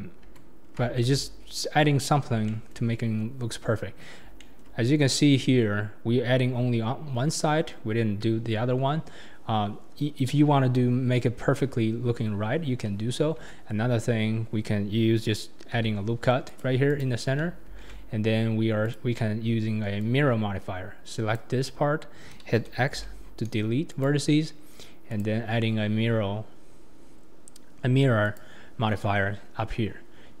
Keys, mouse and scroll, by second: 0.2 Tab, 0.6 scroll down 3, 1.0 alt+z, 1.4 scroll up 4, 2.0-2.3 scroll down 4, 2.5-2.9 shift+middle drag, 2.9-3.5 scroll down 4, 3.5-4.0 scroll up 4, 4.0-4.3 scroll down 4, 4.3-5.0 scroll up 4, 4.4-4.8 shift+middle drag, 7.8 scroll up 4, 8.4-8.8 scroll down 4, 11.8 scroll up 2, 12.3 scroll down 2, 13.5 Tab, 14.1 scroll up 2, 15.7 ctrl+r, 17.7 alt+z, 18.8 click, 19.1-20.0 scroll down 4, 20.0 click, 21.8 scroll up 2, 21.8 middle click, 23.0 x, 25.1-28.2 drag, 29.4-30.4 scroll up 3.